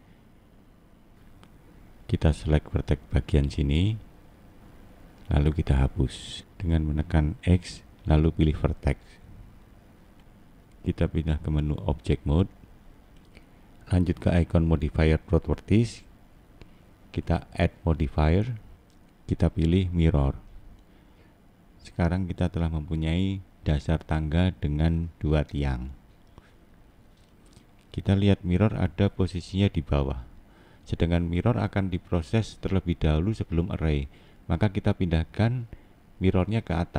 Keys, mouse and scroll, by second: 1.0 click, 2.6 click, 3.4 middle click, 4.9 click, 8.5 x, 9.8 middle click, 11.3 click, 12.6 middle click, 13.9 click, 20.0 middle click, 21.2-21.9 scroll up 2, 21.9 middle click, 22.7-23.3 scroll down 1, 23.3 middle click, 24.1 scroll down 1, 24.9 middle click, 27.8 scroll down 4, 31.0 middle click.